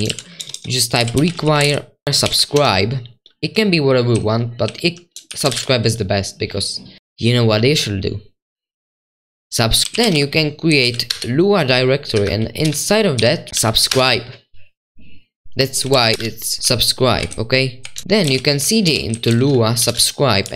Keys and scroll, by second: 1.4 Return, 1.4-2.2 typing, 2.5 Escape, 3.3-6.0 typing, 9.9-11.6 typing, 12.1 Up, 13.1 /, 13.5 Right, 13.9 Return, 15.7-18.2 typing, 19.2-20.5 typing.